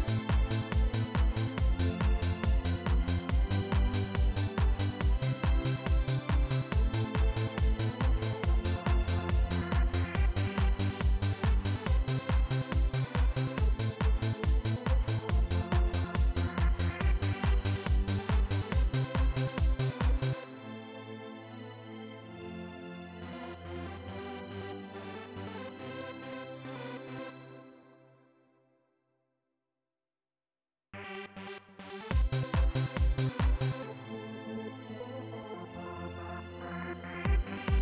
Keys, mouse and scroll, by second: 4.8 click, 5.9 click, 7.3 click, 9.0-15.4 drag, 19.2 click, 20.0 click, 22.6 click, 23.3 click, 24.4 click, 26.8 click, 27.9 click, 28.8-29.7 drag, 29.9 click, 30.5 click, 31.8 click, 35.2 click, 36.2-37.4 drag.